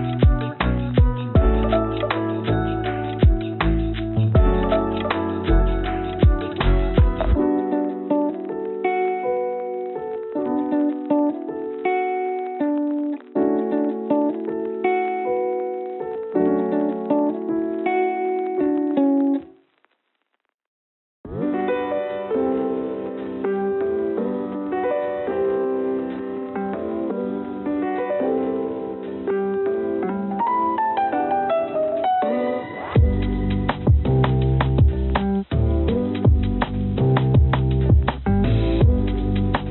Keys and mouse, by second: 0.6 click, 1.6 g, 2.9 click, 3.8 click, 4.6 g, 7.1 click, 8.2 g, 10.8 click, 11.4 click, 12.9 g, 14.5-16.0 drag, 16.3 g, 19.4 click, 20.3 click, 21.5 shift+d, 25.3 s, 26.9 g, 28.9 click, 30.2-31.2 drag, 31.7 g, 33.6-34.7 drag, 35.4 click, 37.5 g.